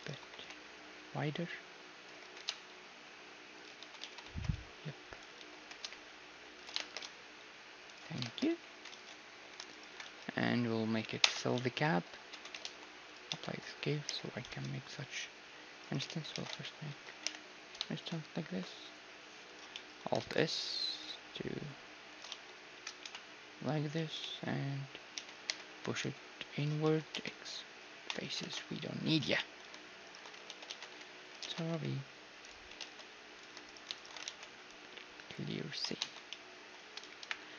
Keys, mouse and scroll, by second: 0.0-2.0 drag, 0.1 a, 0.3 b, 2.3 g, 4.0 a, 4.0 z, 4.3 b, 5.4 z, 5.6 g, 6.8 shift+space, 7.9 click, 8.3-11.6 right drag, 8.3 shift+space, 8.5 a, 8.9 ctrl+s, 10.0 z, 11.2 f, 11.6 z, 12.3 Tab, 12.6 ctrl+a, 13.3 Tab, 13.6-15.5 middle drag, 14.1 i, 16.1 ctrl+z, 16.3 ctrl+e, 17.3 i, 19.8-22.1 middle drag, 20.2 alt+s, 22.3 z, 23.0 KP_1, 24.0 z, 24.3-26.4 middle drag, 25.1 e, 26.8 middle click, 27.1 x, 28.5 ctrl+Tab, 28.5 middle click, 29.4-31.5 middle drag, 30.1-32.1 right drag, 30.5 ctrl+z, 30.7 ctrl+z, 31.0 x, 31.5 ctrl+z, 31.7 x, 32.8 ctrl+Tab, 33.7-35.9 right drag, 34.3 ctrl+e, 36.0 a, 36.3-37.5 middle drag, 37.2 KP_1.